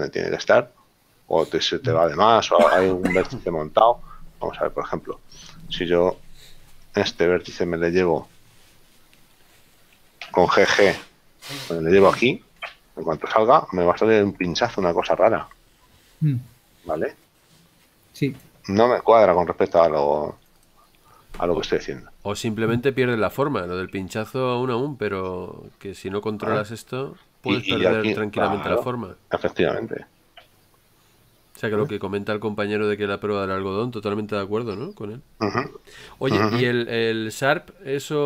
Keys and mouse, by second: 5.7 click, 7.4 right click, 10.5 g, 12.8 click, 14.7 middle click, 22.1 middle click, 24.1 Tab, 25.8 middle click, 30.1 ctrl+z, 33.2 middle click, 37.5 Tab.